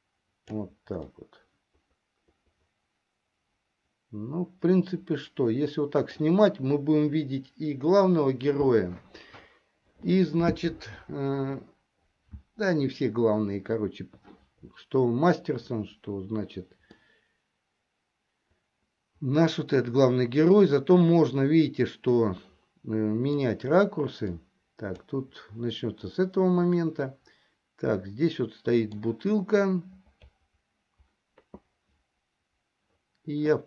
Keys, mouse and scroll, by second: 1.6-6.6 middle drag, 17.5-24.2 middle drag, 25.0 click, 27.5-29.7 middle drag.